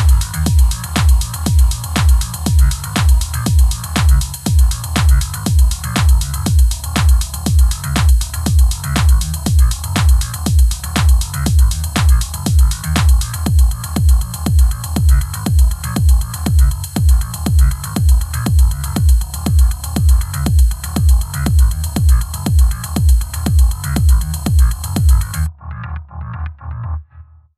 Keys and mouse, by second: 0.2 g, 0.2 y, 0.7 ctrl+s, 2.1 ctrl+s, 3.0 Tab, 3.2 ctrl+r, 4.1 Tab, 4.6 ctrl+s, 5.2 Tab, 5.2 1, 5.5 g, 5.5 y, 5.8 Tab, 5.9 ctrl+s, 8.1 ctrl+s, 8.5 Tab, 8.5-12.1 typing, 9.0 ctrl+r, 9.2 KP_Enter, 10.7 middle click, 10.8 click, 11.2 middle click, 11.7 ctrl+s, 12.0 Tab, 12.0 Tab, 12.8 Tab, 12.9 ctrl+s, 13.0 click, 13.8 Tab, 13.9 ctrl+s, 14.2 ctrl+s, 14.4 ctrl+s, 14.5 Tab, 14.8 click, 17.4 click, 18.5 click, 19.2 click, 27.2 click.